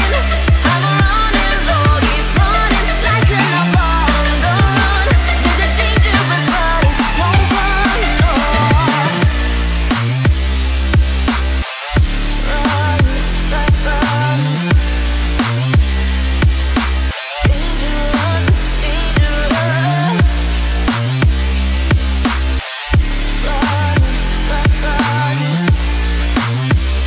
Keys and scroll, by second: 14.9 ctrl+t.